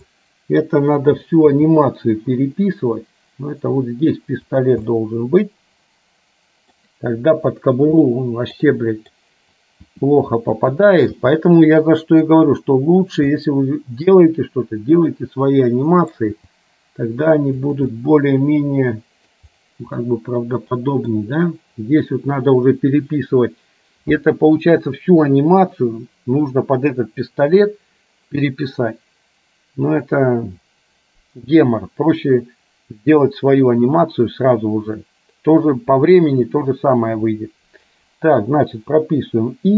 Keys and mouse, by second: 1.7 g, 4.9-6.8 middle drag, 8.3 middle click, 8.8 middle click, 9.9 r, 11.3 g, 13.4-16.2 middle drag, 16.5 g, 18.0-19.4 middle drag, 20.2-21.3 middle drag.